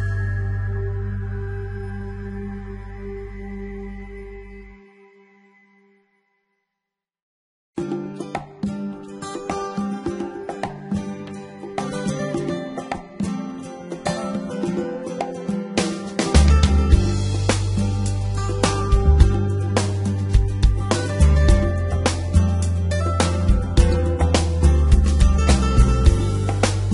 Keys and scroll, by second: 2.8 g, 3.2 y, 6.4 s, 11.4 z, 13.6 g, 13.7 x, 18.1 g, 18.2 x.